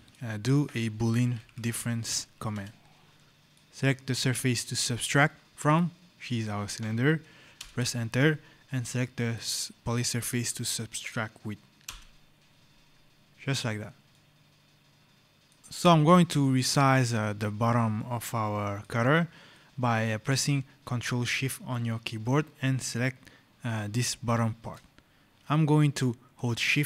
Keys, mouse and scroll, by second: 1.1 b, 1.7 l, 2.4 Return, 3.3 right click, 5.5 click, 7.4 Return, 9.1 click, 11.7 Return, 13.3 click, 14.0 right click, 15.6 click, 17.8 right click, 18.1 click, 19.4 right click, 24.1 click, 25.6 right click.